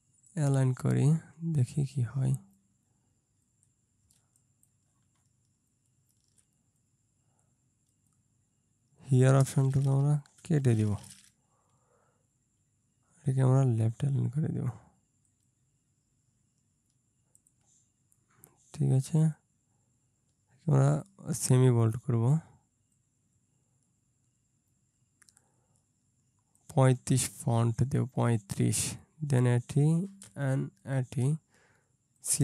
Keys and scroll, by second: 4.2 ctrl+space, 10.5 BackSpace.